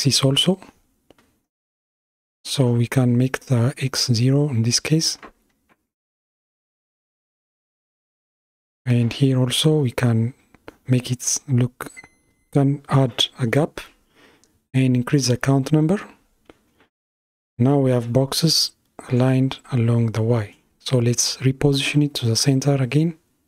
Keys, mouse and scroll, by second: 0.4-3.0 drag, 3.4-5.8 drag, 6.9-7.5 scroll up 2, 7.5-9.7 middle drag, 9.7-18.6 drag, 18.9 KP_7, 21.8 g.